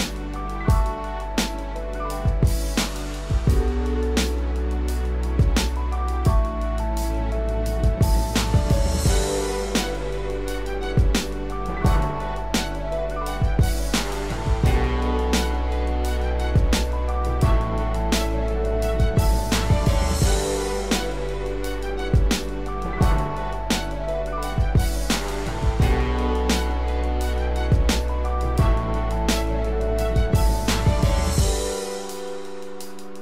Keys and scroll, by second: 5.2 ctrl+-, 21.6 ctrl+=.